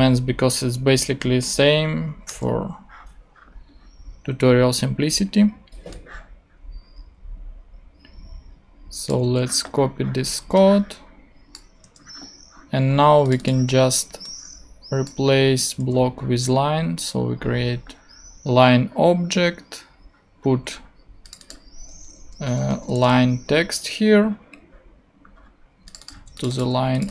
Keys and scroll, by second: 2.3 BackSpace, 9.2 super+c, 11.8 super+v, 15.8 super+v, 21.9-23.0 typing, 23.3 Return, 26.1 super+c, 26.6 super+v.